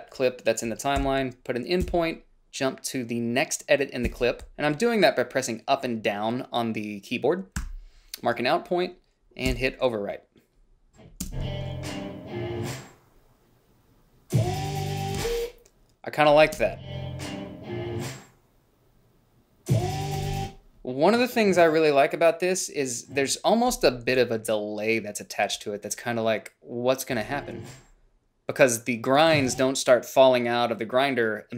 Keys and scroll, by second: 1.3 i, 2.1 Down, 4.3 Left, 7.8 o, 9.7 b, 11.5 space, 15.4 space, 16.7 space, 20.4 space, 27.4 space, 29.5 space.